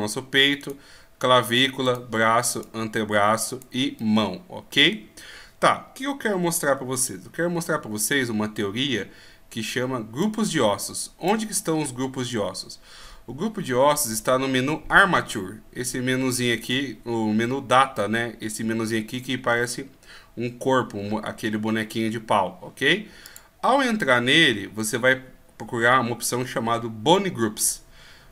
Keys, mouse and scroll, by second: 0.6 right click, 4.0 middle click, 10.2 click, 23.2 click, 27.8 scroll down 1.